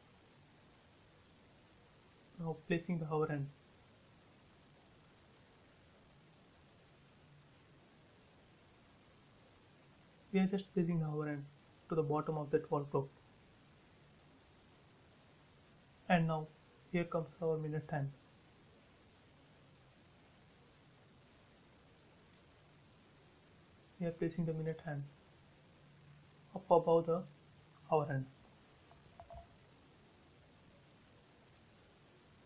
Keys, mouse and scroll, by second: 0.0-5.5 middle drag, 6.3 shift+middle click, 8.1 m, 9.0 click, 10.0 Up, 11.2 click, 11.4 space, 11.6-12.2 scroll up 1, 12.2 scroll, 12.2-12.6 scroll down 1, 14.5 click, 14.5 click, 15.5 m, 15.9-19.2 scroll up 1, 20.5 click, 21.1-21.7 scroll down 1, 21.7 Up, 21.8 scroll down 1, 23.0 shift+middle click, 23.8-24.4 scroll up 1, 27.2 click, 27.3 space, 27.5 scroll down 1, 29.2 middle click, 29.8 scroll down 1, 30.6 shift+middle click, 31.8 click, 32.2-32.4 scroll up 1.